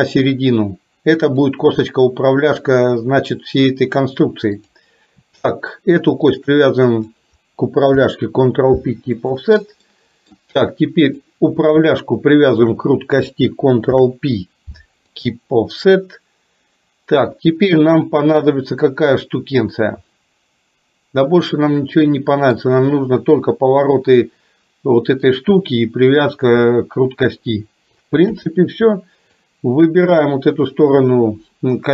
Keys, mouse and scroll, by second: 4.7 click, 6.3 shift+click, 8.0 ctrl+p, 10.0 middle click, 11.0 click, 12.5 shift+click, 13.9 ctrl+p, 19.2-22.7 middle drag, 28.3 KP_7, 29.4 click.